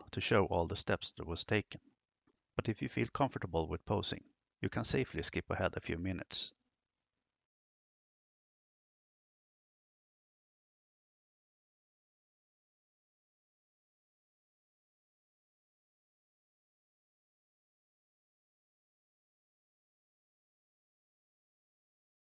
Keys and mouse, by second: 0.1 r, 1.2 click, 3.0 KP_0, 5.6 right click, 6.4 g, 7.6 r, 9.4 r, 9.8 y, 10.0 y, 11.8 Escape, 12.9 ctrl+z, 15.5 KP_1, 16.4 KP_7, 18.2 r, 20.2 g, 21.4 r.